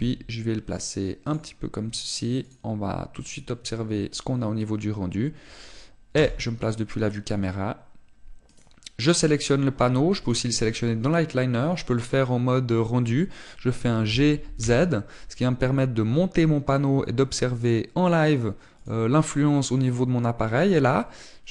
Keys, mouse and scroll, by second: 0.2 click, 0.9 g, 2.3 click, 3.5 click, 7.1 KP_0, 9.4 right click, 11.2 click, 15.0 g, 20.0 click.